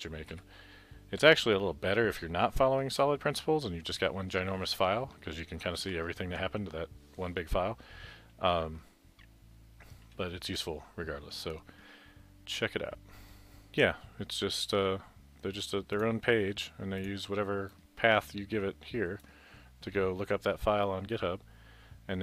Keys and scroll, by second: 1.2 Right, 5.0 Left, 5.9 Left.